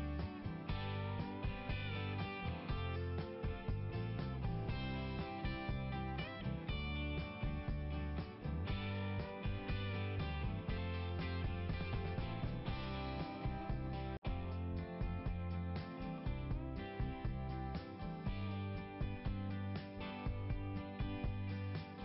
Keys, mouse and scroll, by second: 2.4 click, 4.1 click, 4.6 click, 5.1 right click, 7.4 click, 8.7 click, 10.1 click, 10.9 click, 12.0 click, 12.1 click, 13.5 click, 16.4 click, 18.1 click, 18.9 click, 21.4 click.